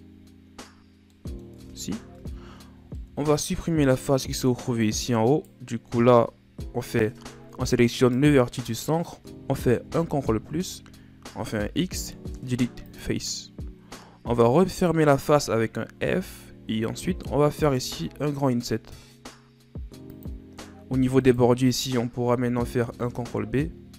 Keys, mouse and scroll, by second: 1.1 middle click, 1.6 Tab, 2.2 Tab, 2.6 middle click, 3.2-3.8 scroll up 7, 5.3 right click, 6.4 KP_Add, 8.0 right click, 9.9 KP_Add, 11.6 x, 14.6 alt+right click, 16.0 f, 17.9 i, 21.2 alt+right click, 22.8 ctrl+b.